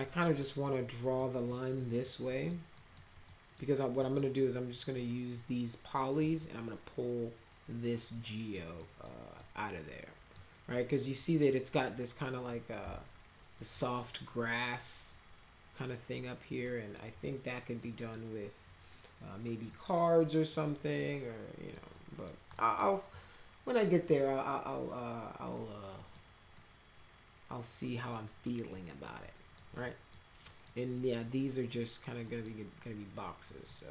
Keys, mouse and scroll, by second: 0.3 middle click, 1.1-1.5 middle drag, 1.7 middle drag, 2.2 middle click, 2.7 middle click, 3.2 middle click, 4.0 middle click, 6.2 middle click, 8.1 middle click, 8.7 middle click, 9.4 middle click, 10.7 middle click, 12.8 z, 13.5 middle click, 16.6 middle click, 17.8 middle click, 19.7 middle click, 20.9 middle click, 21.9 middle click, 22.5 middle click, 25.5 middle click, 26.5-28.4 middle drag, 28.6 middle click, 29.2 middle click, 29.7 middle click, 30.4 middle click, 32.2 middle click, 33.4 middle click.